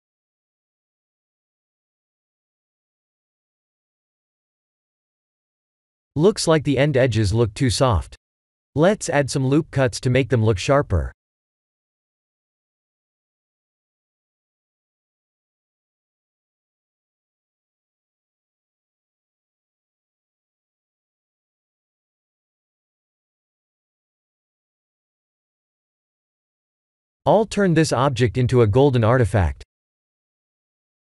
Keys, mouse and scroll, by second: 0.2 click, 0.6 right click, 4.2 click, 6.1 Tab, 6.5-7.1 scroll up 1, 7.1 scroll up 2, 7.2 shift+middle click, 8.1-8.8 scroll up 3, 9.0 ctrl+r, 15.6 middle click, 17.0 3, 17.2 click, 18.5 i, 20.2 Tab, 20.6 middle click, 23.7-26.6 scroll down 8, 24.2 middle click, 26.6 click, 27.4 click, 30.2 click.